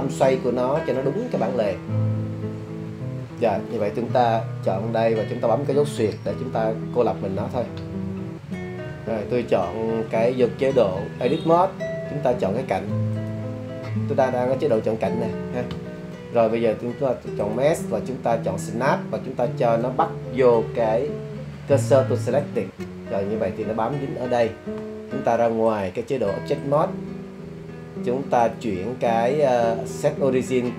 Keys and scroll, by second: 6.3 /.